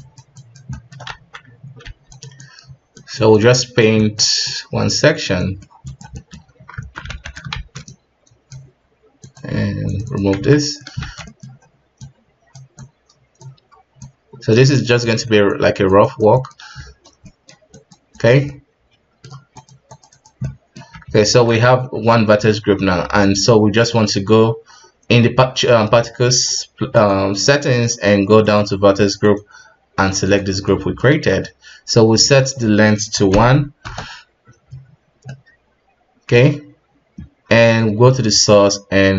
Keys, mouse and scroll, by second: 0.0 click, 0.7-1.8 middle drag, 1.8 f, 2.4-4.0 drag, 4.0 middle click, 4.5 click, 5.4 middle click, 5.9 click, 6.1 middle click, 6.4 KP_3, 6.7 Tab, 7.1 alt+a, 7.5 shift+z, 7.8 click, 9.2 drag, 9.8 click, 10.3 Tab, 10.6 middle click, 11.0 shift+z, 11.3 middle click, 11.4-12.0 scroll up 3, 12.0-13.5 drag, 13.5-14.0 scroll down 3, 14.0-15.0 drag, 15.0 middle click, 15.5 click, 16.3 middle click, 16.6 KP_1, 17.2 middle click, 17.7 click, 18.5-19.5 middle drag, 19.5 click, 20.4 middle click, 21.2 ctrl+Tab, 21.7 scroll down 3, 22.1-23.2 middle drag, 23.2 click, 23.6 scroll down 5, 26.9 click, 27.6 scroll down 4, 28.4-30.6 drag, 30.6-31.1 middle drag, 31.1 KP_1, 32.1-35.2 drag, 35.3-37.6 middle drag, 37.6-39.1 drag.